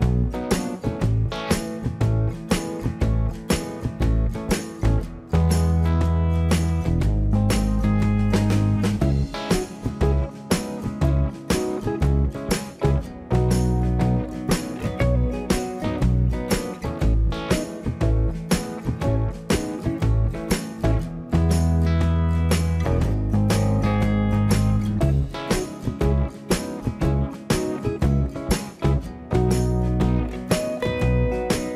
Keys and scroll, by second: 3.5 e, 19.2 space, 19.3 Escape.